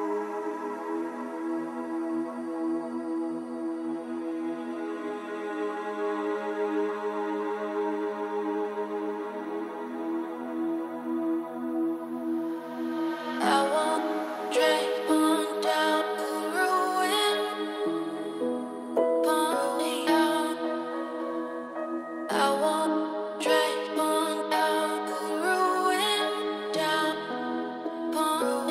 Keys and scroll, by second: 6.0 shift+a, 10.1 KP_2, 16.0 g, 28.5 ctrl+alt+z.